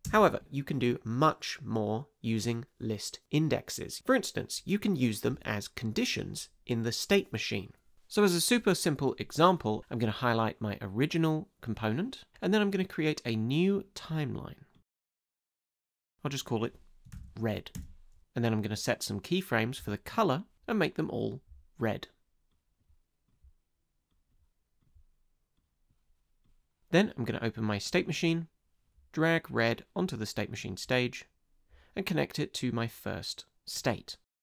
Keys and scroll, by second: 0.0 space, 16.8-17.7 typing, 17.8 Return.